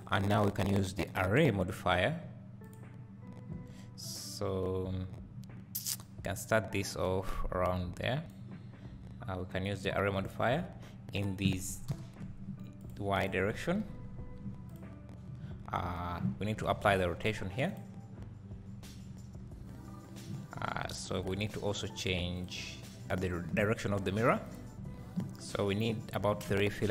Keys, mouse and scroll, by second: 0.3-10.0 drag, 10.8 click, 12.9 click, 14.8-16.2 drag, 21.2 click, 22.0 click, 22.4 click, 24.5 click, 26.1-26.9 scroll down 2.